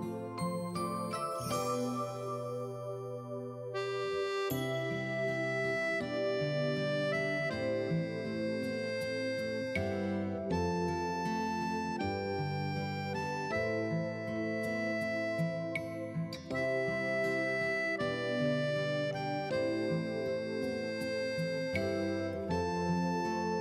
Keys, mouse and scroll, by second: 1.7 click, 4.9 click, 12.3 right click, 14.4 click, 15.6 t, 16.8 scroll down 1, 17.3-18.9 typing, 18.1 alt+middle click, 20.6 click.